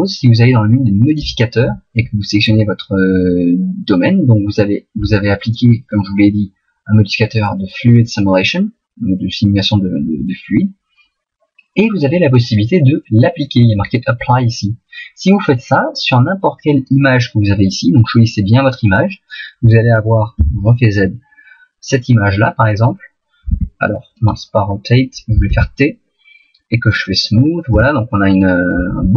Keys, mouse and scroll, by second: 16.8 click, 20.5 z, 21.1 middle click, 23.5 r, 24.3 right click, 25.5 t, 26.9 click, 27.7 t, 28.4 middle click.